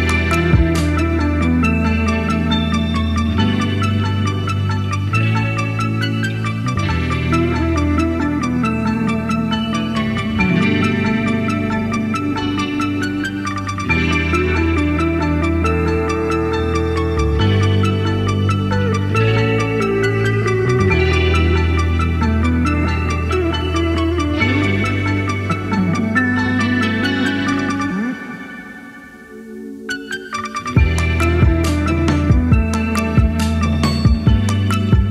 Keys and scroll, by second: 0.1 super+z, 0.2 super+z, 0.6 super+z, 11.6 super+z, 11.8 super+z, 12.0 super+z, 15.1 super+z, 16.6-17.0 Right, 25.3 Left, 25.5 Left, 25.6 Left, 25.7 Left, 25.8 Left, 25.9 Left, 28.7 Right, 28.9 Right, 29.1 Right, 29.9 Right, 30.2-31.1 Right.